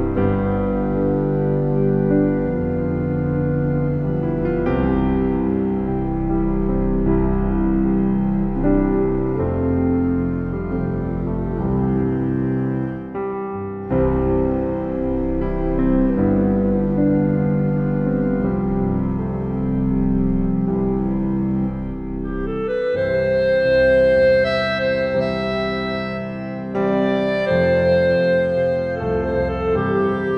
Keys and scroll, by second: 18.1 ctrl+u.